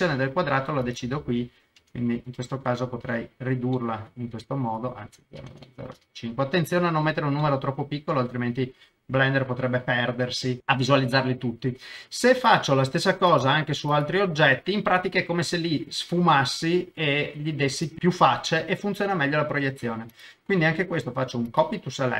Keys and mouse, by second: 0.8-3.4 drag, 3.7 middle click, 4.8-6.2 drag, 7.4-8.8 middle drag, 9.1 KP_0, 12.5 click, 13.3 click, 13.9 click, 17.8 shift+click, 20.1-21.6 drag.